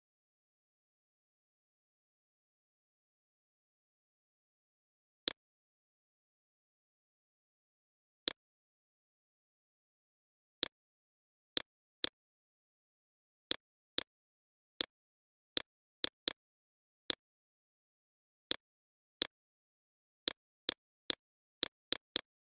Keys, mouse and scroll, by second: 8.7 ctrl+z, 9.0 click, 11.3 Down, 11.5 Down, 11.7 Down, 11.9 Down, 12.5 Down, 12.8 Down, 13.6 click, 15.2 Up, 15.4 typing, 15.9 Up, 22.3 Right.